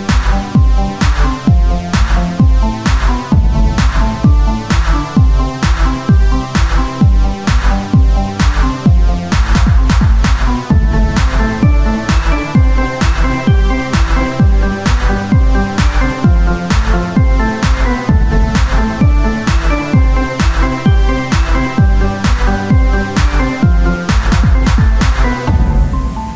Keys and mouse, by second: 1.1 ctrl+Tab, 2.4 Tab, 2.7 Tab, 5.7 ctrl+n, 6.1 Tab, 6.7 click, 6.9 Tab, 7.0 click, 8.8 ctrl+n, 9.1 Tab, 13.9-15.0 right drag, 15.0 Tab, 15.7 ctrl+Tab, 17.9 e, 19.7 click, 20.3-22.5 drag, 22.5 f, 23.5 middle click, 24.1 e, 25.8-26.3 drag.